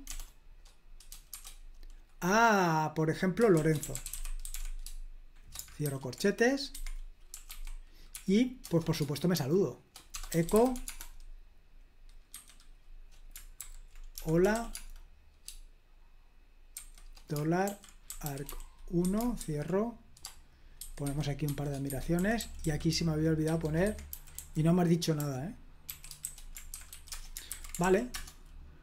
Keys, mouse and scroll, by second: 1.3 =, 3.3-5.8 typing, 6.7 Escape, 7.1-8.1 typing, 8.6 Return, 9.3-11.2 typing, 12.3 typing, 13.6-14.9 typing, 16.7-19.4 typing, 20.8-27.4 typing, 21.9 Escape, 27.4 super+h, 27.8 ctrl+p, 28.1 Return.